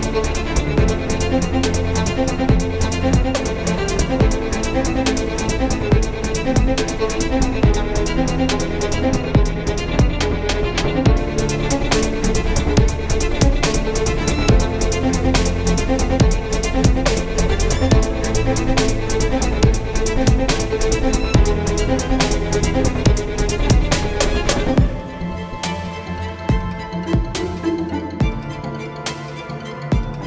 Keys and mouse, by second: 0.4-2.8 right drag, 1.0 c, 3.9 KP_7, 6.3 KP_3, 7.9 c, 12.0 click, 12.6 Tab, 13.7 z, 15.3 KP_7, 15.9 z, 16.3 z, 16.4 z, 18.7 z, 26.5 KP_1, 28.6-29.7 drag, 29.7 shift+a.